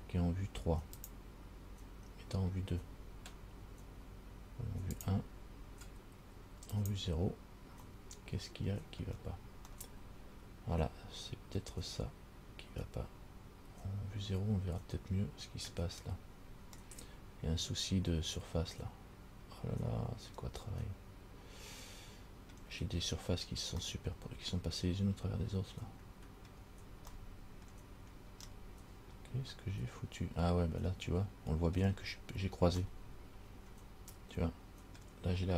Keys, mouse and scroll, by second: 1.3 click, 2.7-4.4 scroll down 2, 5.1 click, 6.9 click, 8.1 middle click, 9.3-9.6 scroll down 2, 9.9 middle click, 16.2-16.9 scroll up 3, 17.0 middle click, 20.3 middle click, 21.0 middle click, 21.6 middle click, 24.1 middle click, 27.3 middle click, 28.2-28.6 scroll down 2, 28.7 middle click, 33.1 middle click.